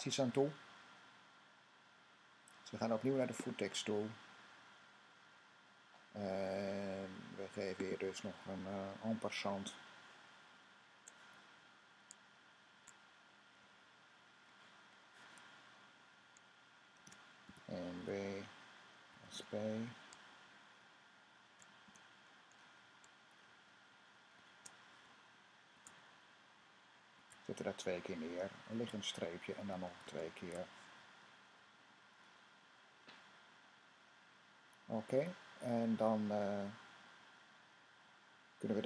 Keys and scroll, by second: 16.8-19.7 typing, 21.7 typing, 23.3 Left, 23.5 Left, 23.6 Left, 23.8 Left, 24.0-24.3 typing, 25.4-38.8 typing, 27.6 super+v.